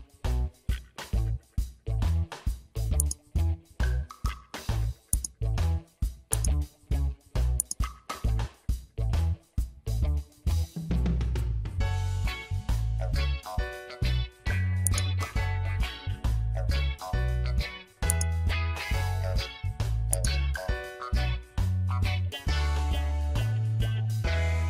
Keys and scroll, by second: 11.9 Return.